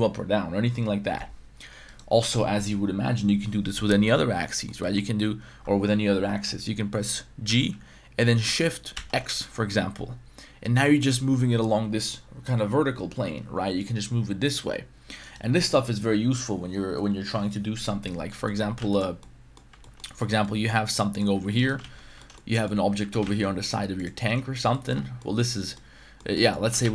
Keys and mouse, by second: 1.9 right click, 4.0-4.7 middle drag, 4.8 middle drag, 7.4 g, 8.9 shift+x, 15.2-18.2 right drag, 18.3 middle click, 18.8 x, 19.2-19.6 middle drag, 19.8 shift+middle drag, 20.2 right click, 20.7 Tab, 20.9-21.2 middle drag, 21.4 3, 21.6 right click, 21.8 shift+s, 22.2 shift+middle click, 22.5 middle click, 23.3 Tab, 23.3 shift+a, 24.7 middle click, 25.2 middle drag, 25.7-26.2 middle drag, 26.3 middle drag, 26.6 g, 26.8 shift+x.